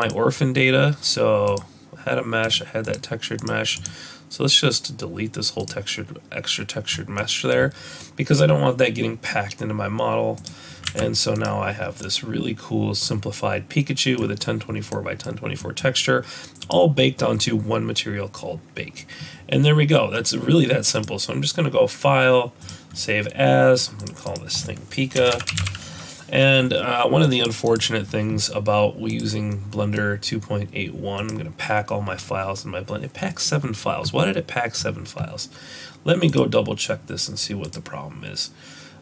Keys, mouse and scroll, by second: 10.4 click, 10.8 z, 11.8 scroll down 2, 12.0 middle click, 14.9 middle click, 15.2 scroll up 2, 15.6 middle click, 16.6 click, 20.9 click, 29.1 click.